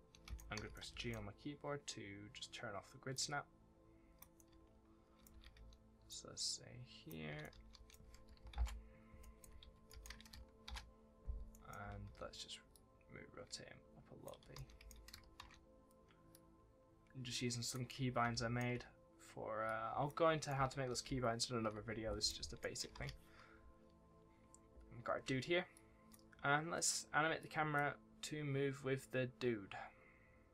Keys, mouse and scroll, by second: 0.0-1.3 typing, 0.7 right click, 3.1 click, 4.3 right click, 4.4 w, 5.2 2, 5.5 w, 6.0 click, 7.0-7.9 typing, 7.3 right click, 9.1-10.0 typing, 9.1 right click, 9.8 right click, 10.6 ctrl+shift+l, 11.4 right click, 11.7 d, 12.0 w, 12.6 click, 14.3 1, 14.5 right click, 14.7 s, 15.3 ctrl+shift+w, 16.2 click, 17.8 right click, 17.9 w, 19.6 click, 20.4 right click, 20.5 w, 22.5 right click, 22.9 ctrl+s, 25.7 click.